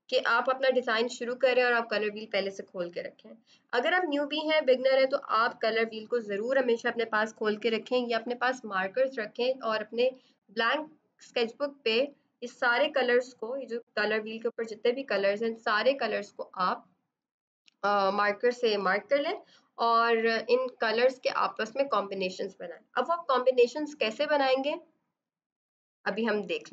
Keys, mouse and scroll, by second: 14.9 b, 25.1 F7, 26.5 click.